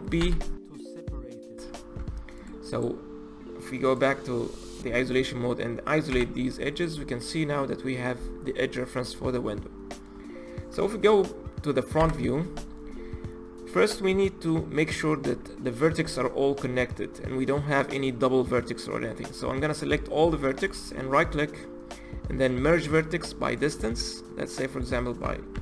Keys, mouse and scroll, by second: 0.2 p, 2.0 Tab, 2.4 click, 2.7 click, 3.8 click, 4.9 KP_Divide, 6.1 KP_Divide, 7.0-11.8 middle drag, 12.0 KP_1, 13.9 Tab, 15.3 1, 16.1 a, 20.7-24.6 right drag, 24.7-25.6 drag.